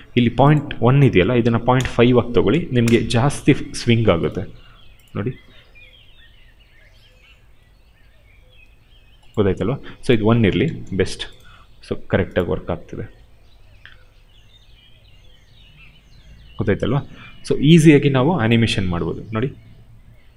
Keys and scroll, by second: 2.7 Return, 10.4 1, 10.6 Return.